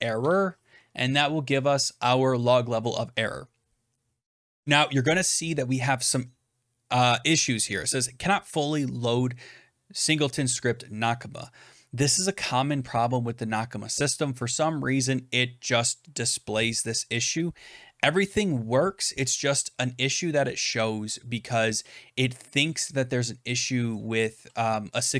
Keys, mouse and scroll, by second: 0.0-2.6 typing.